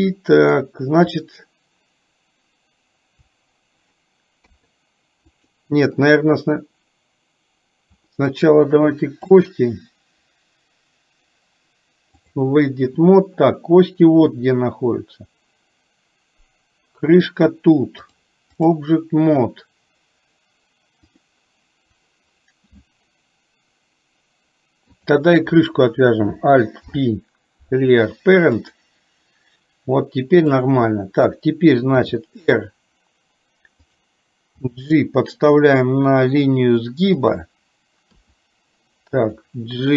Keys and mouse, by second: 4.4 KP_3, 5.3 click, 9.4-12.4 drag, 18.2 click, 24.9 click, 26.8 alt+p, 30.4 click, 32.1 r, 34.7 g, 38.2 r.